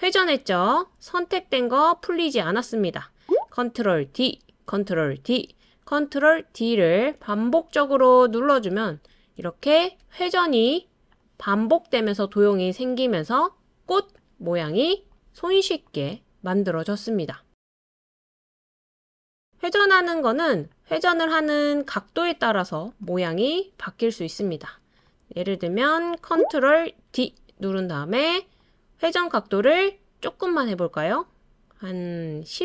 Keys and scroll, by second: 4.1 super+d, 5.3 super+d, 6.6 super+d, 7.7 super+d, 8.8 super+d, 10.0 super+d, 27.1 super+d.